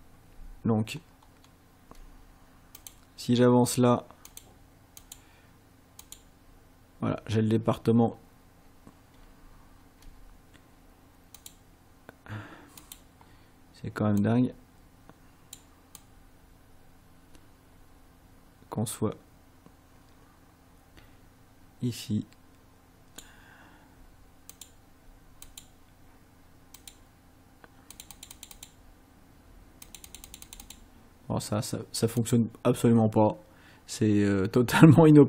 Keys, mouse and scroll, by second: 1.0 ctrl+scroll down 2, 2.8 click, 4.3 click, 5.0 click, 6.0 click, 11.4 click, 12.8 click, 14.2-15.7 drag, 16.0-23.4 drag, 24.6 click, 25.5 click, 26.8 click, 28.0 click, 29.8 click, 32.2 click.